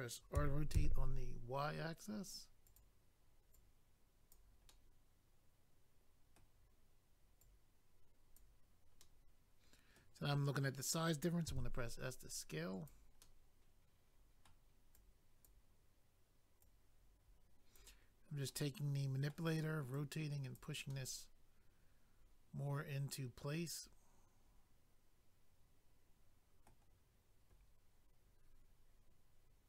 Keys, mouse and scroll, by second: 0.4-1.5 typing, 2.7 click, 2.8 click, 3.5 click, 4.7 middle click, 7.4 click, 9.0 middle click, 11.9 s, 12.7 click, 13.2 middle click, 14.9 click, 16.6 click, 18.5 middle click, 19.9 click, 20.9 middle click.